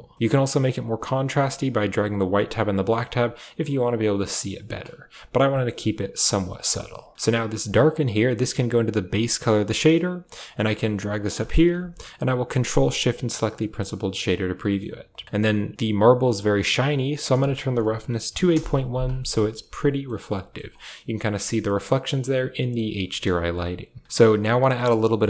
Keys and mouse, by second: 0.0 middle click, 0.5-1.5 drag, 1.8-4.3 drag, 5.4 shift+click, 6.1 a, 6.4 click, 6.6 middle click, 8.2-9.2 drag, 9.6 click, 10.2 g, 11.2 middle click, 12.3 ctrl+shift+click, 12.6 click, 14.5 click, 16.9-18.4 drag, 19.6-20.4 middle drag, 20.9-21.3 middle drag, 21.5-22.6 middle drag, 23.1 KP_0, 24.0 shift+middle click.